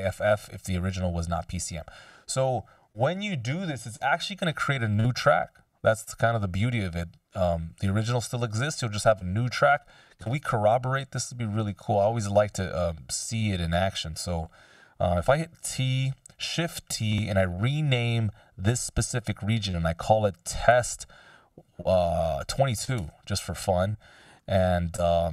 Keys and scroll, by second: 15.7 t, 16.4 shift+t, 19.9-21.2 typing, 22.5 2, 23.0 Return, 24.3 t.